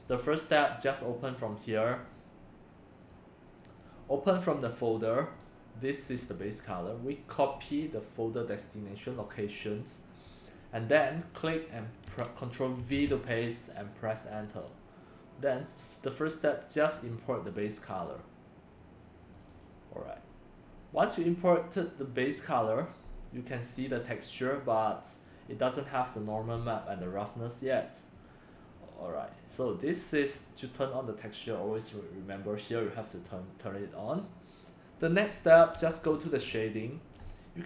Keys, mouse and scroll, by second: 0.4 click, 0.8 click, 2.1 click, 3.1 click, 3.7-8.2 drag, 5.3 scroll up 1, 10.0 click, 11.2 click, 12.9 ctrl+v, 14.1 Return, 16.9 click, 17.0-19.4 drag, 20.3 middle click, 21.6-22.1 middle drag, 23.0 scroll up 4, 23.4-23.9 scroll down 3, 24.3-25.2 middle drag, 28.2 click, 28.5 scroll, 29.6 click, 30.3 scroll, 30.4 click, 33.2-35.7 middle drag, 35.7 click, 37.2-37.6 middle drag.